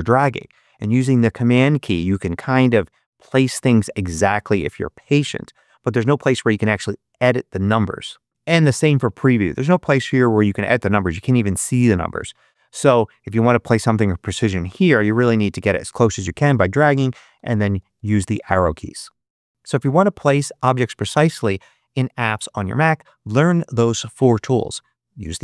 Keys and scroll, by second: 8.3 BackSpace, 17.3 Up, 17.7 Left.